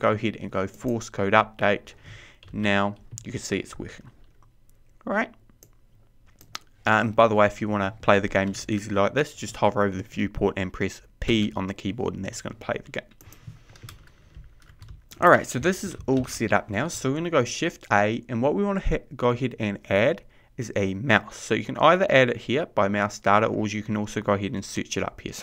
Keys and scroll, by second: 13.0 p, 19.0 shift+a.